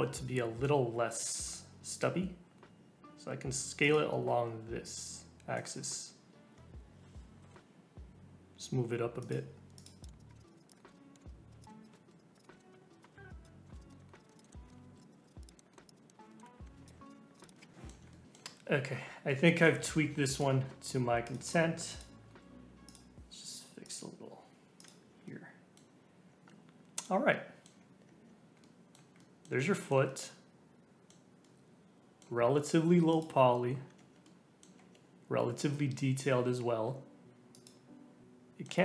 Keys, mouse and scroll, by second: 4.1 g, 5.8 g, 9.4 Tab, 9.7 click, 10.0 click, 10.0 middle click, 10.1 scroll down 1, 10.2 click, 10.3 middle click, 10.4 click, 10.7 middle click, 11.2 click, 11.5 scroll down 4, 11.6 click, 11.6 middle click, 11.8 click, 11.8 scroll up 2, 12.0 ], 12.1 [, 12.1 [, 12.2 click, 12.4 middle click, 12.5 middle click, 12.9 click, 13.0 scroll up 2, 13.1 ctrl+z, 13.3 click, 13.4 middle click, 13.7 ], 13.8 click, 13.9 middle click, 14.2 click, 14.2 middle click, 14.3 click, 14.4 middle click, 14.4 scroll down 3, 14.5 middle click, 14.5 scroll up 2, 14.7 shift+middle click, 14.9-15.8 typing, 15.0 click, 15.2 click, 15.4 click, 15.5 scroll down 1, 15.5 middle click, 15.6 scroll up 2, 15.7 middle click, 15.8 click, 16.0 scroll down 2, 16.0 middle click, 16.3 middle click, 16.4 scroll up 2, 16.5 scroll down 2, 16.6 middle click, 16.7 Tab, 16.7 Tab, 16.8 click, 16.9 Tab, 16.9 Tab, 17.1 click, 17.1 Tab, 17.4 click, 17.5 scroll up 3, 17.5 middle click, 17.6 Tab, 17.7 Tab, 17.7-20.3 middle drag, 20.3 click, 20.5 Tab, 21.2 click, 21.8 click, 22.2 g, 23.8 click, 24.2 g, 24.9 Tab, 25.2-26.3 middle drag, 26.3 Tab, 27.0 scroll down 1, 27.3 middle click, 28.0 Tab, 28.6-33.1 middle drag, 33.1 click, 33.9 Tab, 34.2 middle click, 34.7 Tab, 36.6 alt+z, 37.5 click, 38.1 scroll up 1, 38.2 middle click.